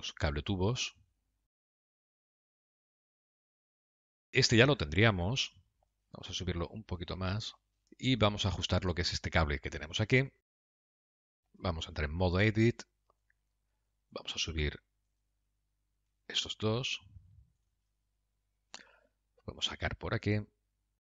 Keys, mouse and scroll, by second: 0.0 middle click, 1.0 g, 2.5 middle click, 4.1 middle click, 5.1 middle click, 6.6 g, 9.0 Tab, 9.2 click, 9.6 Tab, 10.0 click, 10.5 middle click, 12.1 Tab, 12.8 middle click, 14.6 click, 15.5 shift+click, 16.6 g, 18.4 middle click, 20.2 g.